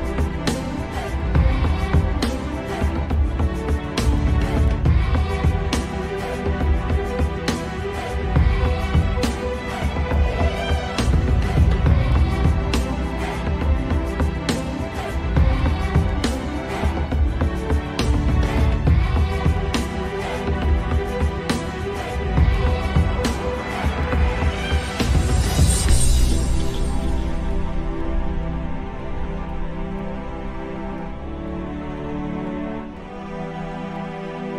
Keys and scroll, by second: 6.9 shift+F2, 20.1 ctrl+z, 21.8 Delete, 25.6 Delete, 31.9 ctrl+z.